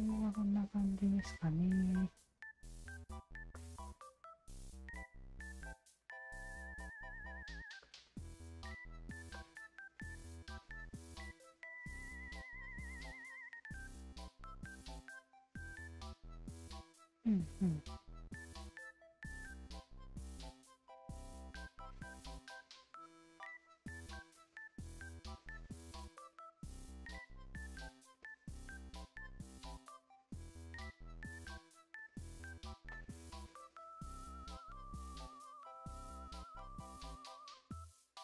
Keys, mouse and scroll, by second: 0.0 alt+right click, 0.6 alt+click, 1.4 alt+click, 2.2-3.3 alt+shift+drag, 3.5 alt+click, 3.9-5.8 alt+drag, 6.7 alt+click, 7.4 click, 7.8 alt+click, 8.3 Tab, 8.6 alt+click, 9.0 alt+right click, 9.4-10.9 alt+drag, 11.3-11.8 alt+drag, 12.1 alt+click, 17.3 click, 17.3 alt+right click, 17.5 Tab, 18.6 alt+click, 20.3 alt+click, 21.7-22.7 alt+drag, 24.4-27.7 alt+drag, 28.4 ctrl+z, 29.5 shift+z, 30.5 alt+click, 32.5 Tab, 32.9-33.3 alt+drag, 33.4 alt+click, 33.8-35.8 alt+drag, 36.2 ctrl+z, 36.4 ctrl+z, 36.9 ctrl+z, 37.9 q.